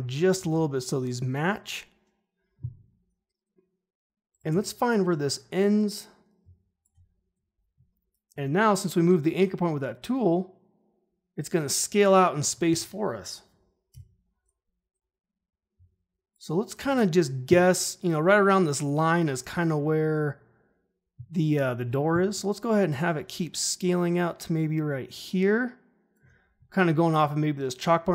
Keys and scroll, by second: 0.3 ctrl+shift+h, 4.4 u, 13.9 u.